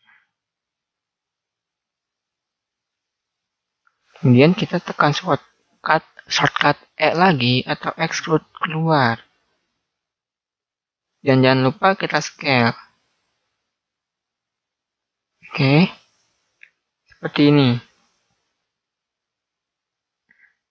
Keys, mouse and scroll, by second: 7.8 e, 11.3-13.1 middle drag, 12.5 s, 15.6-17.3 middle drag, 17.3 click, 19.9 click.